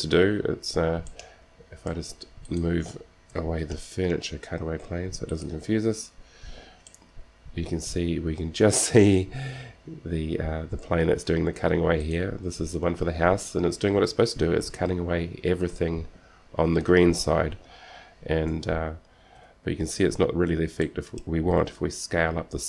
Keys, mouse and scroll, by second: 1.4-2.8 middle drag, 2.8 click, 3.2-4.9 right drag, 3.8 g, 6.6-7.6 drag, 7.6-9.0 middle drag, 10.0 middle click, 12.4-14.1 right drag, 18.6 z, 19.6 KP_7, 20.4-21.4 middle drag, 20.4 scroll down 1, 22.0 s.